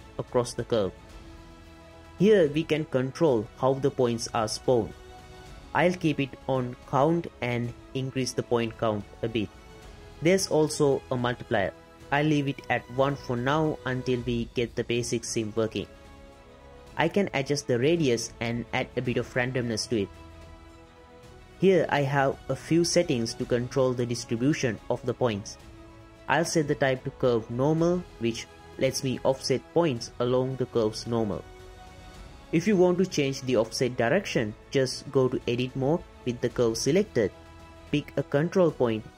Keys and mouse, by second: 1.6-3.1 drag, 4.8-5.4 drag, 6.2-8.9 drag, 10.4-11.2 drag, 11.9-14.7 middle drag, 15.3 middle click, 16.0-16.7 drag, 17.5 shift+click, 19.3-20.8 drag, 22.9-23.6 drag, 24.0-25.3 drag, 27.8-31.8 shift+drag, 32.7-33.4 drag, 33.4 Tab, 34.6 click.